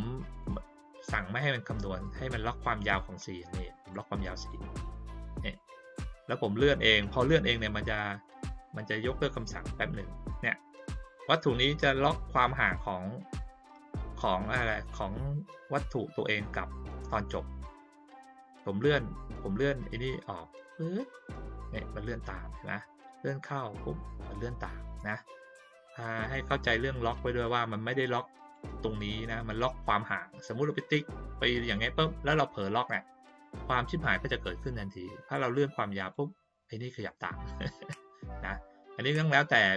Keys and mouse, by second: 0.1 click, 0.4 click, 3.2-3.9 drag, 5.8-9.4 drag, 20.1-21.1 drag, 22.9-23.4 drag, 26.2-28.5 drag, 29.5-31.7 drag, 35.4-36.1 drag.